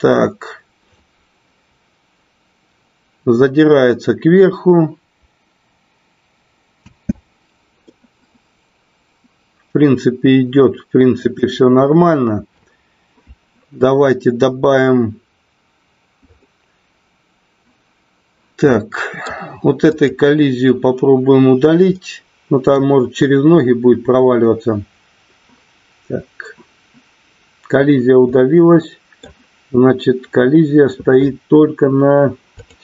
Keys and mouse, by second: 7.1 space, 7.8-11.3 middle drag, 18.7 middle click, 19.8 click, 22.0 middle click, 28.4 middle click, 32.6 click.